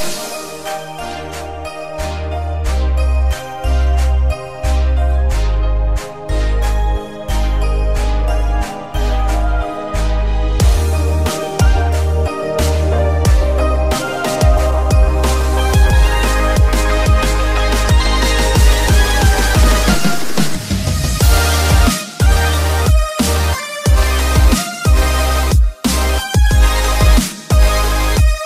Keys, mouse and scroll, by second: 1.0 click, 2.4 click, 2.9 click, 4.5 right click, 8.2-9.2 scroll up 1, 9.2 KP_7, 9.8-10.5 scroll down 3, 10.8-11.5 shift+middle drag, 12.6 click, 13.6 Tab, 14.0 click, 15.2 c, 16.8 click, 18.0 click, 19.0 click, 20.0 click, 21.4 click, 22.4 click, 23.4 click, 24.5 click, 25.5 click, 26.4 click, 27.5 click.